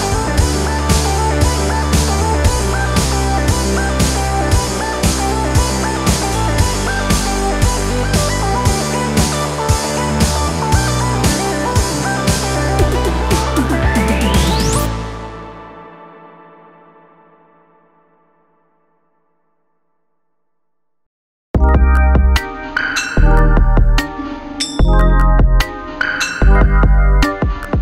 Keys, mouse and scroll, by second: 4.6 click, 19.3 click, 23.3 click.